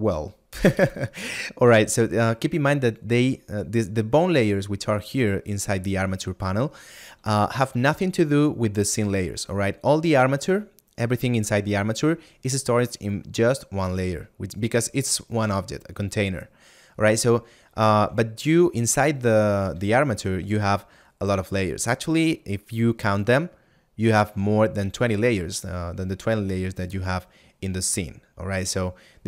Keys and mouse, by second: 5.5 click.